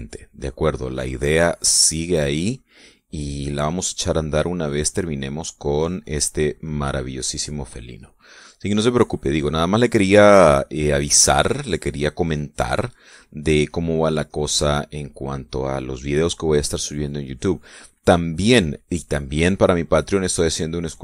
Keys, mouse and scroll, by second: 0.0 shift+middle click, 1.2-3.0 drag, 3.2-6.1 drag, 6.2-8.8 drag, 9.0 middle click, 10.4-15.4 drag, 15.9 click, 16.4 middle click, 16.8-20.0 scroll up 1, 20.8-21.0 drag.